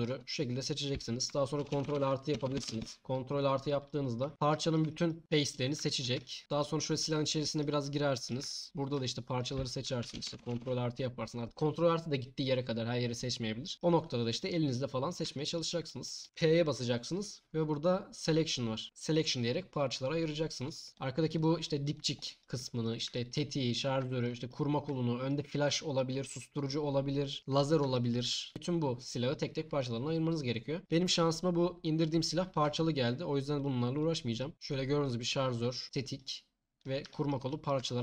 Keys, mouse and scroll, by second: 1.6 ctrl+KP_Add, 16.3 p, 21.9 click, 22.9 click, 32.6 Tab, 33.6 click.